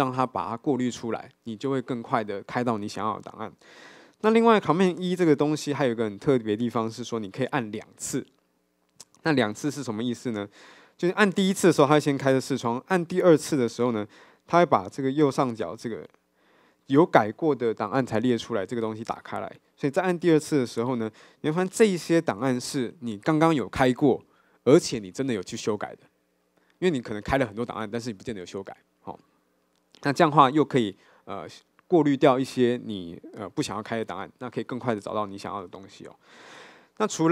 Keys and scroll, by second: 5.0 super+e, 5.1 super+t, 10.7 super+e, 20.5 super+e.